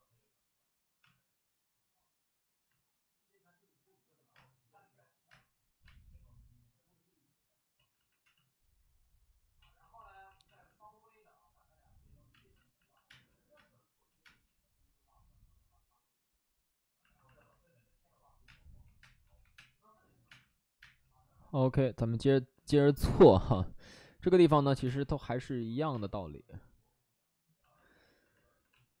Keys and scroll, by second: 0.9 space, 4.3 space, 5.2 space, 5.7 space, 7.7 ctrl+z, 7.8 ctrl+z, 8.1 x, 9.5 ctrl+z, 9.8 ctrl+z, 10.4 ctrl+z, 12.2 space, 12.4 ctrl+z, 13.0 space, 13.5 space, 14.1 space, 18.4-20.7 typing, 23.0 space, 23.9 space, 24.7 1, 24.7 space, 25.7 ctrl+z, 25.8 space, 28.6 space.